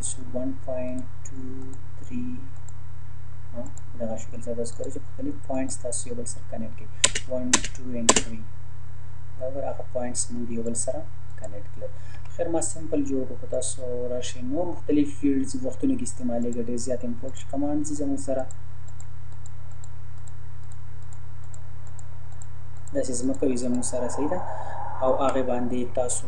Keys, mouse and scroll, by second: 7.0 space, 10.7 click, 12.2 Delete, 13.5 click, 16.4 click, 25.0 Escape.